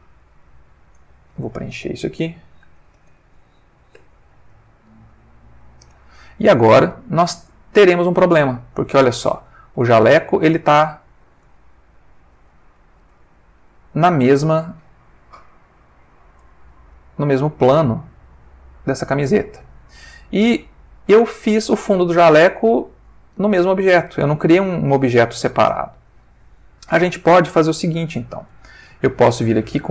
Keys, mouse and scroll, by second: 0.2 click, 1.0 click, 2.9 shift+space, 3.9 2, 4.5 click, 8.9 click, 9.9 ctrl+middle click, 10.8-13.8 middle drag, 14.9 ctrl+Tab, 16.4 click, 17.0-20.9 middle drag, 21.3 click, 22.5 g, 23.6 Escape, 29.5 click.